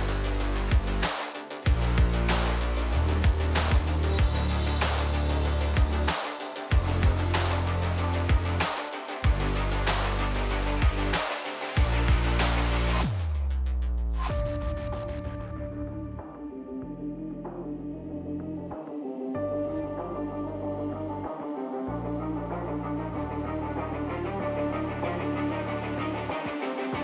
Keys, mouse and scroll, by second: 3.2 middle click, 3.8-5.8 drag, 9.1-10.3 middle drag, 9.3 r, 10.9-13.4 middle drag, 14.0-16.7 middle drag, 17.3-19.3 middle drag.